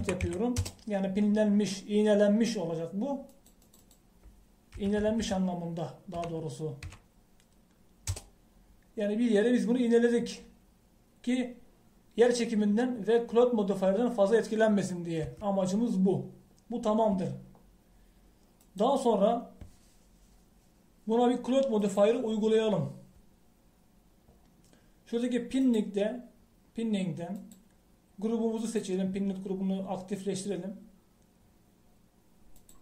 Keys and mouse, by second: 0.4 i, 4.4-6.1 drag, 6.1 Left, 16.3 Tab, 19.7-30.2 drag.